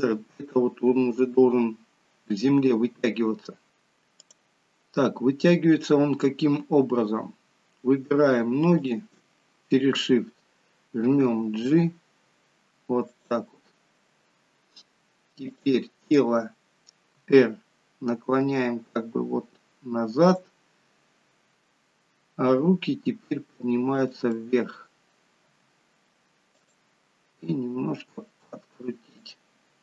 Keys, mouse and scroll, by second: 4.1 click, 8.7 shift+click, 11.2 g, 15.5 click, 17.0 r, 21.5 click, 22.4 g, 24.3 middle click, 25.5 g, 27.3 r.